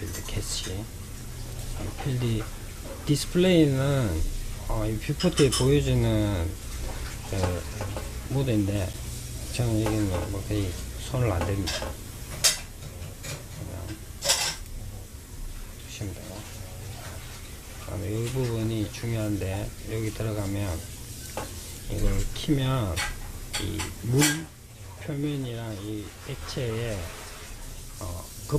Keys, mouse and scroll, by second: 0.6 click, 1.3-4.4 scroll down 1, 13.6 click, 14.4-17.4 scroll down 1, 18.5 click, 19.1-22.3 scroll down 4.